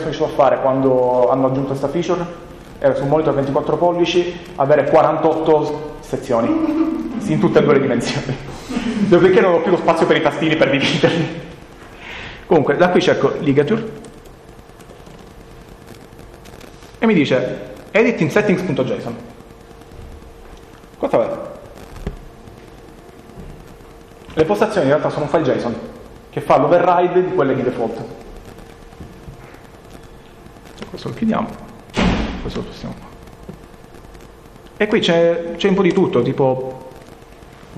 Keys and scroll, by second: 13.3 l.